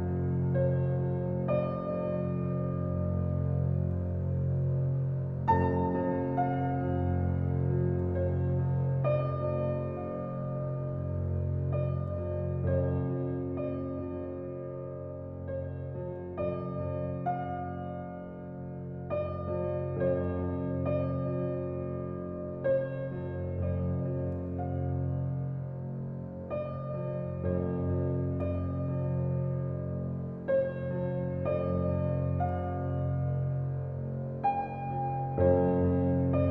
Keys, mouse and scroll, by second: 1.9 click, 5.9 ctrl+alt+z, 6.6 click, 12.3 ctrl+alt+z, 12.9 click, 13.9 alt+click, 14.5 click, 15.4 ctrl+alt+z, 15.9-19.1 alt+right drag, 19.1 alt+click, 19.9-21.2 drag, 24.1 ctrl+alt+scroll down 1, 24.7 ctrl+alt+scroll down 1, 27.8 ctrl+alt+scroll up 1, 29.0 ctrl+alt+scroll up 1, 29.9-30.4 alt+scroll down 2, 30.7 space, 30.9 click, 31.3 space, 32.2 alt+click, 33.3-36.5 drag.